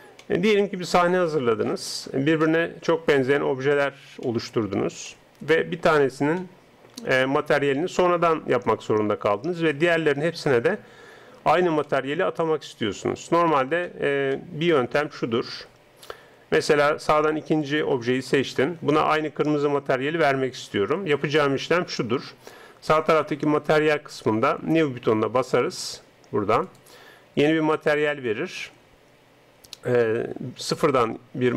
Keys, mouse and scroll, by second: 0.2-8.6 middle drag, 11.8-17.6 middle drag, 17.6 right click, 26.6-28.6 drag.